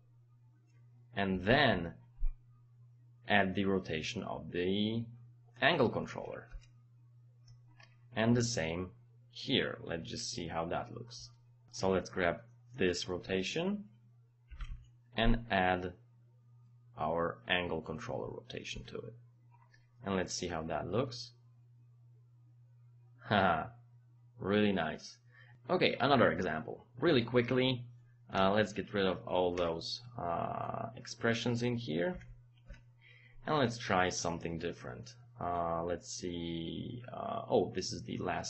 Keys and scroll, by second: 1.3 space, 1.5 KP_Add, 6.5 Return, 14.5 space, 14.6 KP_Add, 18.7 Return, 28.4 Delete, 32.1 Delete, 32.7 Return.